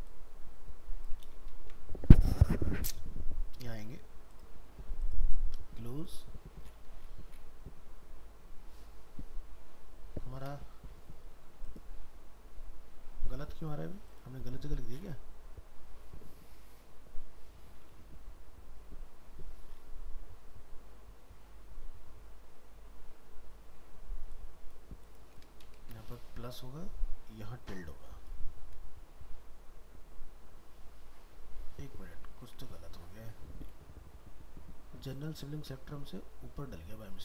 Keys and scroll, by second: 32.4 ctrl+z.